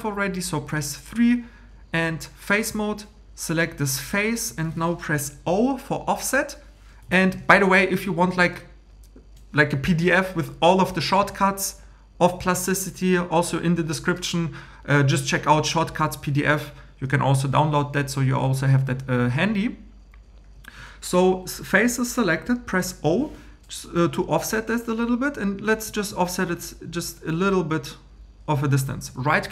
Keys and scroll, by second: 23.0 o.